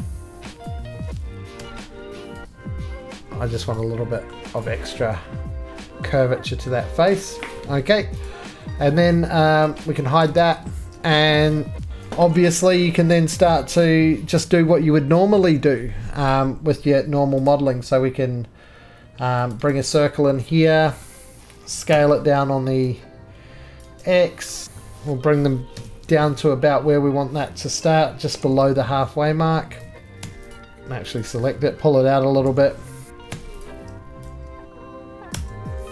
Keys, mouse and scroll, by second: 0.6 click, 1.5 g, 1.9 middle click, 3.5 click, 3.7 right click, 4.3 middle click, 4.3 middle click, 4.6 click, 5.6-6.3 scroll down 7, 6.0 middle click, 6.7 middle click, 6.8-7.5 scroll down 5, 7.0 shift+middle click, 7.4 shift+middle click, 7.8 middle click, 7.8-8.2 scroll, 8.2 click, 9.8 click, 10.2 shift+middle click, 10.2 z, 10.7 middle click, 11.2 middle click, 11.5 shift+middle click, 11.9 shift+middle click, 11.9 1, 12.0 shift+middle click, 13.0 shift+scroll, 16.3 click, 17.4 click, 19.5 click, 19.6 right click, 20.9 middle click, 21.0-21.4 scroll, 21.9 s, 23.7 scroll down 1, 23.7 click, 24.0 right click, 24.5 middle click, 24.6-25.7 scroll down 8, 25.1 middle click, 25.7 1, 28.1 shift+middle click, 28.5 g, 29.9 click, 29.9 middle click, 30.2 2, 30.5 click, 31.2 click, 32.4 g, 33.1 click, 33.1 right click, 33.2 3, 33.6 click, 35.3 Tab.